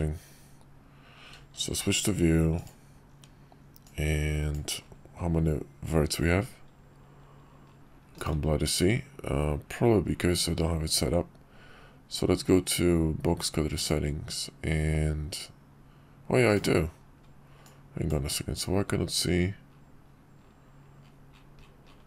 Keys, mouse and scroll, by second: 1.7 shift+v, 3.8-8.6 drag, 13.8-16.8 drag, 17.6-22.0 drag.